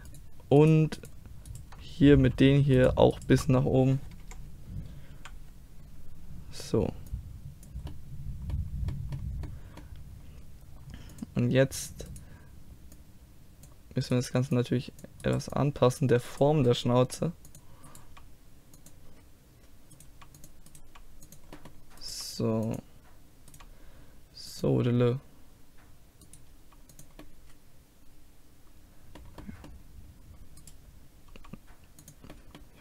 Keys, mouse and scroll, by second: 0.1-2.2 right drag, 2.2 a, 4.2 KP_1, 5.1 KP_3, 7.1-8.9 drag, 11.1-13.0 drag, 12.1 right click, 13.9 click, 17.0 g, 17.4 click, 18.0 g, 20.1 g, 20.8 g, 22.1 g, 23.1 click, 23.2 g, 23.5 g, 26.5 g, 27.2 middle click, 27.4 click, 27.6-29.4 middle drag, 30.6-32.4 drag, 31.3 g, 32.5-32.8 middle drag.